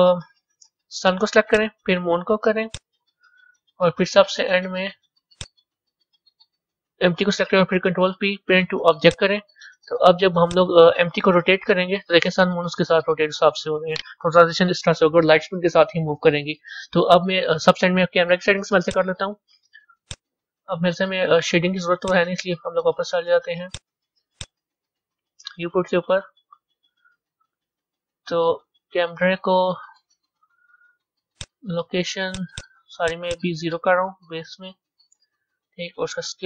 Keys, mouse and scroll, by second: 1.6 shift+click, 2.7 shift+click, 5.4 ctrl+click, 9.1 ctrl+p, 10.5 click, 11.7 r, 20.1 click, 22.0 click, 24.4-26.2 drag, 26.2 scroll up 4, 27.0 scroll up 3, 27.9-32.2 middle drag, 32.2 click, 32.5 click, 33.3-36.1 drag, 36.1 s.